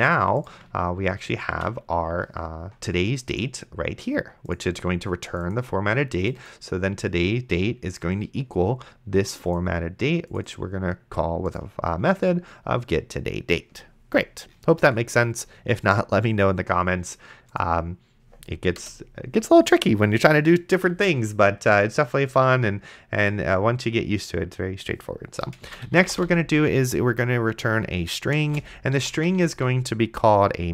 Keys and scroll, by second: 19.1 Return, 25.6-26.8 typing, 28.3-30.0 typing.